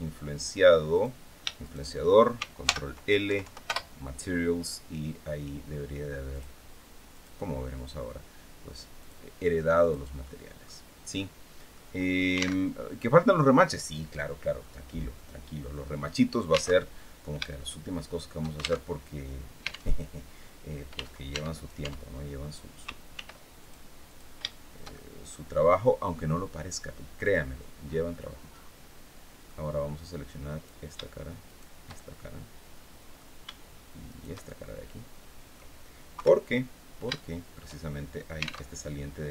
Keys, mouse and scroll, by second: 0.6 right click, 1.3 shift+right click, 2.3 ctrl+shift+l, 3.0 ctrl+Down, 3.4 ctrl+shift+Return, 6.0 click, 6.8 click, 8.7 click, 9.5 click, 9.9 middle click, 10.6 scroll down 1, 10.8 middle click, 11.6-12.0 scroll up 1, 12.3 alt+Tab, 14.9 scroll down 2, 16.5 alt+Tab, 17.2-18.3 shift+middle drag, 18.5 alt+shift+Tab, 19.6 alt+Tab, 20.6 Tab, 21.2 right click, 22.8 ctrl+r, 23.3 ctrl+click, 23.7 ctrl+click, 24.1-25.9 ctrl+shift+middle drag, 26.9 click, 27.4-27.8 scroll up 1, 27.8-29.3 middle drag, 30.2 right click, 31.1 shift+right click, 31.6-33.0 shift+middle drag, 33.8 shift+right click, 34.2-35.4 shift+middle drag, 35.8 KP_3, 36.8 shift+middle click, 38.4 alt+Tab.